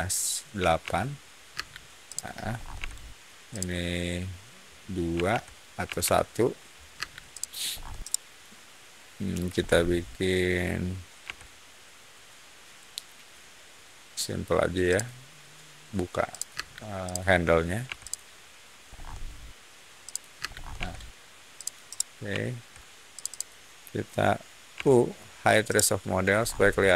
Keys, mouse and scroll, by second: 0.5 8, 0.7 Return, 1.4 space, 2.0 click, 2.3 middle click, 2.7 f, 3.4 click, 5.1 2, 5.2 Return, 5.8 1, 5.9 Return, 6.9 space, 7.2 click, 7.6 scroll up 1, 7.9-8.3 middle drag, 9.5 middle click, 11.1 c, 14.8 click, 16.2 click, 16.4 space, 17.0 click, 17.8 p, 17.9 click, 18.8 scroll up 1, 19.9 click, 20.3 space, 20.4 middle click, 20.7 Escape, 21.5 click, 21.8-22.6 middle drag, 23.1 shift+click, 23.2 shift+click, 24.7 u, 25.6-26.1 middle drag, 26.3 scroll down 1, 26.8 click.